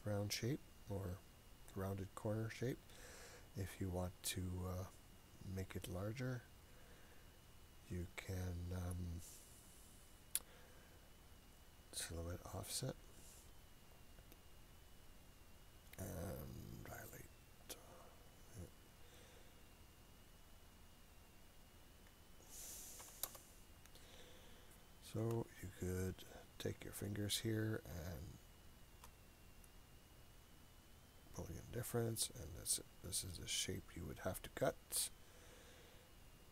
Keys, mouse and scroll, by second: 1.7 click, 12.7 click, 17.7 click, 21.5-23.9 drag, 24.4-25.6 scroll up 2, 26.3 click, 27.1 click, 28.2 shift+click, 29.7 click, 32.7 click, 33.7 click, 34.5 click, 35.2-35.5 scroll down 3, 35.6-36.5 scroll up 2.